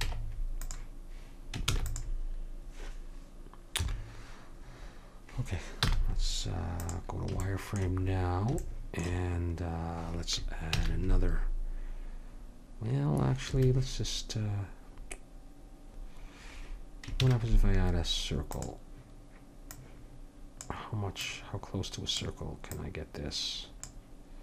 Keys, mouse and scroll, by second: 0.0 Tab, 1.7 ctrl+s, 3.8 KP_7, 5.8 z, 8.7 middle click, 9.7 middle click, 10.7 shift+a, 17.2 shift+a, 19.7 click.